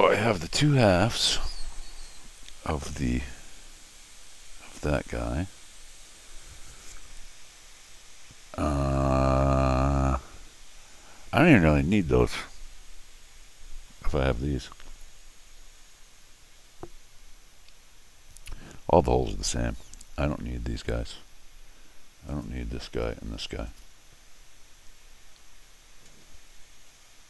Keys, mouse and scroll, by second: 0.2-13.9 middle drag, 22.3 click, 22.9 click, 23.7 click.